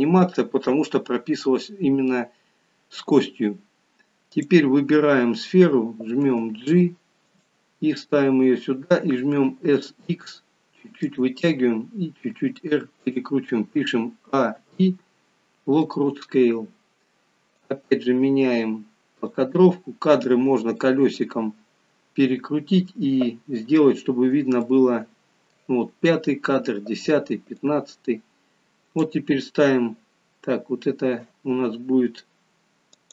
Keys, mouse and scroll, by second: 4.4 click, 6.2 g, 9.6 s, 12.6 r, 14.3 a, 14.6 i, 17.6 click, 19.7-20.9 scroll up 13, 20.9 middle click, 24.0-24.8 scroll up 5, 24.6 middle click, 27.7 click, 32.9 click.